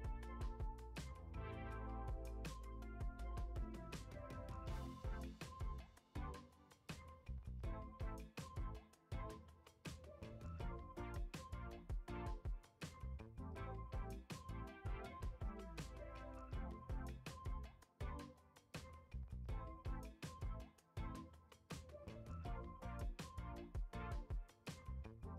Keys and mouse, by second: 0.0 g, 1.6 click, 2.2 middle click, 2.9 shift+middle drag, 3.4 middle click, 4.0 shift+middle drag, 4.6 F6, 5.4 shift+a, 7.3 g, 8.2 g, 9.1 s, 10.3 shift+middle click, 10.8 Tab, 11.2 shift+middle drag, 11.7 f, 12.3 e, 15.4 g, 18.3 click, 18.7 click, 19.0 middle click, 19.6 i, 21.7 click, 22.3 shift+drag, 23.4 shift+click, 24.0 shift+click, 24.5-25.0 middle drag.